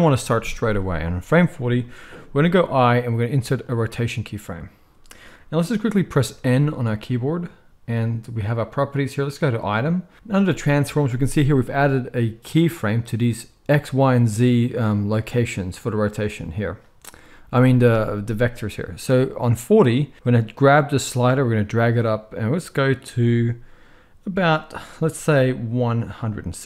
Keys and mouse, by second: 2.4 i, 6.2 n, 9.3-20.2 middle drag, 20.2-26.6 drag.